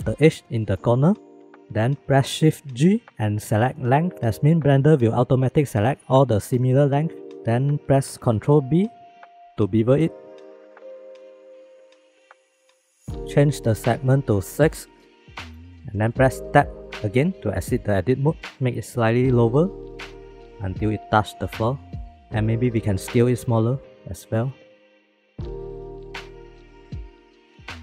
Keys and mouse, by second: 0.8-1.4 drag, 2.6 shift+g, 8.6 ctrl+z, 9.1 ctrl+b, 14.1-15.9 drag, 17.1 Tab, 18.4 g, 22.0 middle click, 22.8 s, 25.2 shift+middle click, 25.5 g.